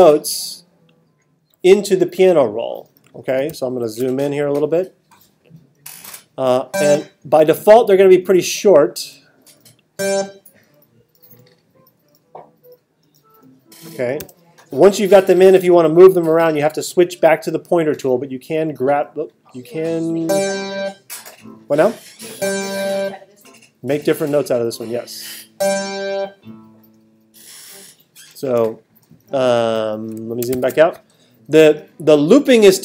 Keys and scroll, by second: 3.5 alt+super+8, 14.2 t, 30.5 alt+super+8.